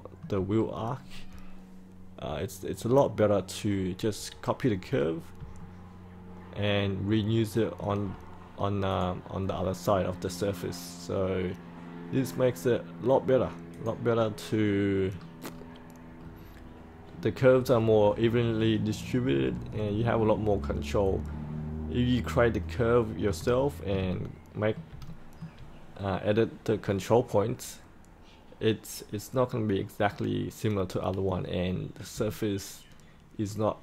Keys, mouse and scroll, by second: 0.5-5.3 scroll up 1, 5.5-7.7 alt+middle drag, 8.8 click, 15.0-19.1 scroll down 1, 19.1-19.7 scroll up 1, 19.9-22.1 alt+middle drag, 22.5 alt+middle click, 23.5 shift+middle click, 24.0 alt+middle click, 25.0 shift+middle click, 25.8-31.3 scroll down 1, 31.3-32.1 scroll up 1, 32.2-33.8 alt+middle drag.